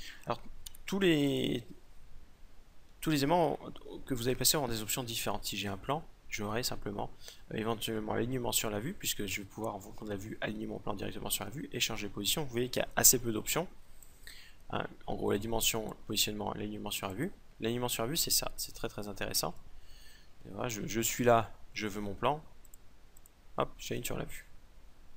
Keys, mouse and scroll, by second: 0.2 x, 2.8 shift+a, 13.5-15.5 drag, 16.6-18.5 drag, 18.5-20.3 right drag, 20.3-22.1 middle drag, 22.1-24.7 drag.